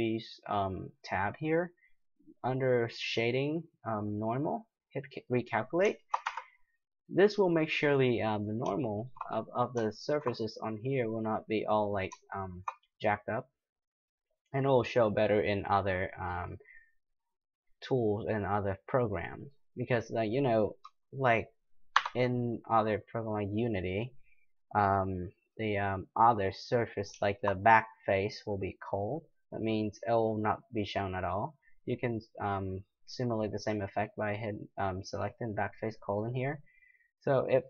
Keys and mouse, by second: 5.1-6.2 drag, 6.2-7.1 middle drag, 6.2 Tab, 22.0 n, 35.5 click, 36.1-37.4 middle drag.